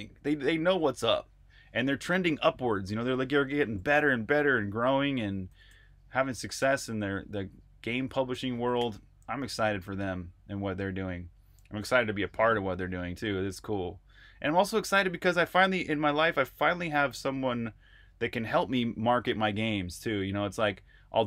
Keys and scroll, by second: 5.0 ctrl+r, 5.3-6.5 typing, 8.6 j.